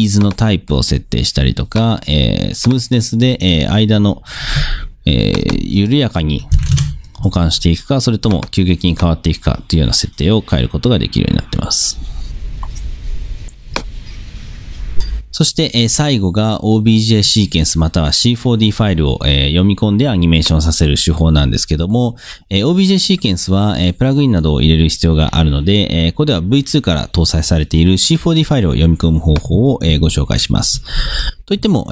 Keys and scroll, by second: 6.4-7.2 typing, 30.0 super+Tab.